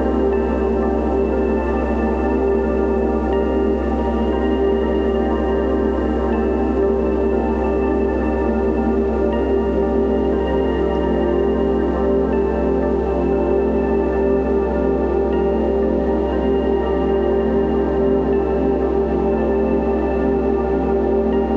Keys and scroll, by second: 12.5 ctrl+c, 12.8 ctrl+v, 19.0 ctrl+g.